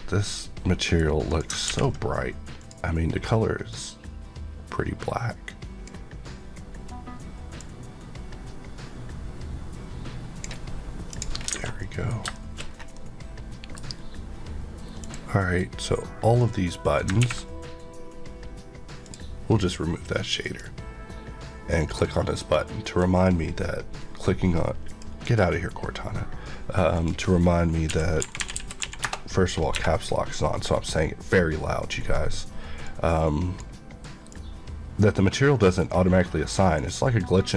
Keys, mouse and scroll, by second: 0.1 middle click, 1.2 click, 2.5 click, 3.6 click, 7.5 click, 11.5 alt+a, 11.8 middle click, 12.2 shift+middle click, 12.9 middle click, 14.9 click, 17.1 ctrl+click, 19.0 click, 19.6 click, 27.8-28.8 typing, 29.0 Return, 32.7 click.